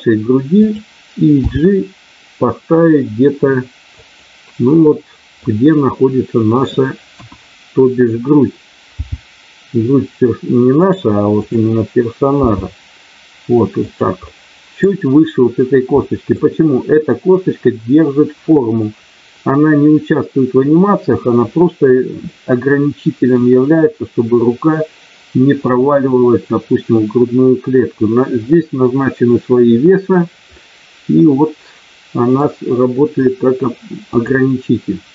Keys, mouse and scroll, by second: 0.5 click, 1.3 g, 3.9 click, 5.3-6.5 middle drag, 7.0 KP_1, 8.9 g, 11.3 click, 12.3 g, 13.8 click, 16.0 middle click, 22.3 middle click, 28.5-28.8 scroll up 1, 30.6-32.4 middle drag.